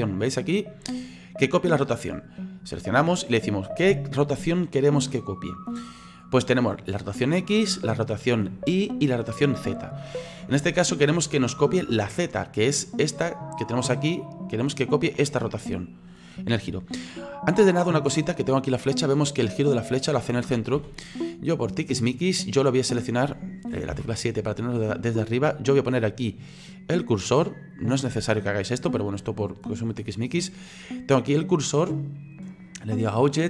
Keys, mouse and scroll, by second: 12.7 right click, 13.7-20.8 drag, 20.8 ctrl+z, 21.1-22.4 middle drag, 22.4-23.9 scroll up 4, 23.9 KP_7, 27.7 click, 33.1-33.4 drag.